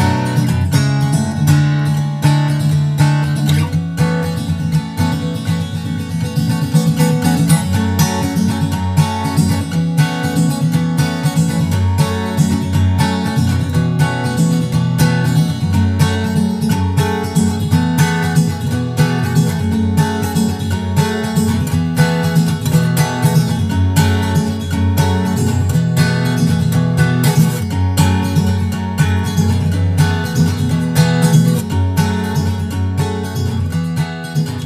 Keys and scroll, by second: 0.5 super+Tab, 1.9 super+Tab, 10.8 super+s, 11.4 super+Tab, 19.2 super+Tab.